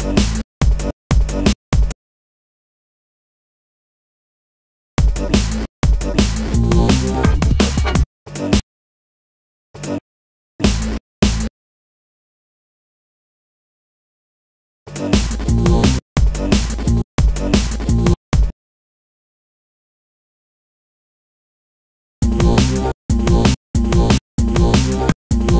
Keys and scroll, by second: 3.7 BackSpace, 5.3 space, 6.1 super+space, 7.9 space, 9.4 space, 15.7 space, 19.1 super+space, 19.2 super+e.